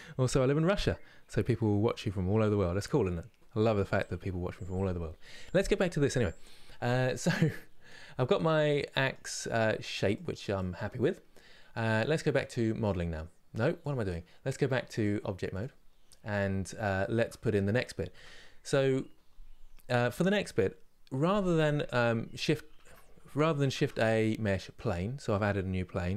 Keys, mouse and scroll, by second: 5.5 KP_3, 7.2-12.5 drag, 13.5 click, 16.0 scroll up 2, 16.6-17.8 shift+middle drag, 17.8 Tab, 22.5 Tab, 24.5 shift+a, 26.0 r.